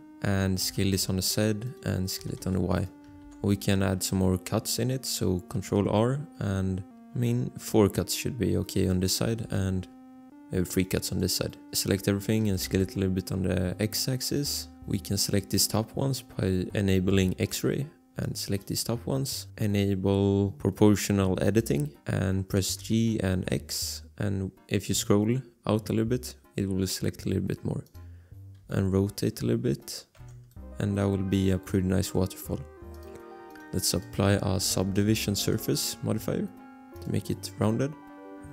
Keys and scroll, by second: 0.6-2.9 typing, 3.4 ctrl+r, 9.6 ctrl+r, 11.8 a, 12.4 s, 12.6 x, 23.0 g, 23.3 x, 28.6 r, 30.1 Tab, 34.3-35.4 typing.